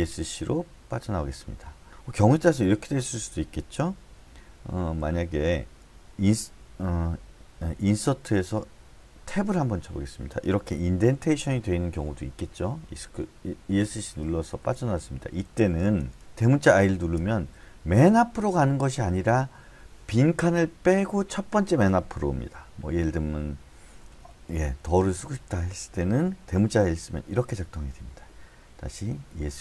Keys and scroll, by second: 0.8 Escape, 5.0-5.8 h, 8.0 i, 9.3 Tab, 11.0 Escape, 14.2-17.2 typing, 23.9-25.4 typing, 29.3 Escape.